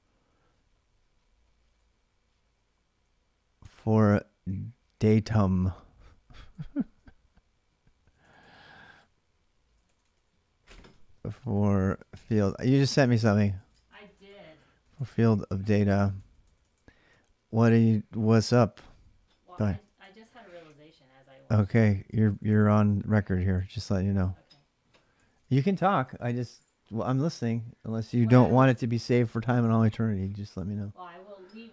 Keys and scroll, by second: 0.0 h, 1.2 l, 1.4 l, 2.8-6.6 typing, 7.6-17.3 typing, 18.4-20.9 typing, 21.9 ctrl+[, 22.0-24.0 typing, 25.0 ctrl+[, 25.1-25.8 typing, 25.5 Return.